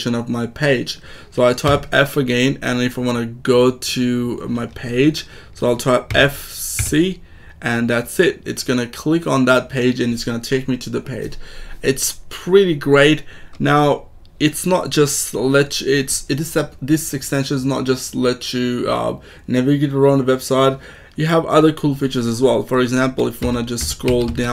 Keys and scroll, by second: 1.6 f, 6.0 f, 6.7 c, 23.3 k, 24.0 j.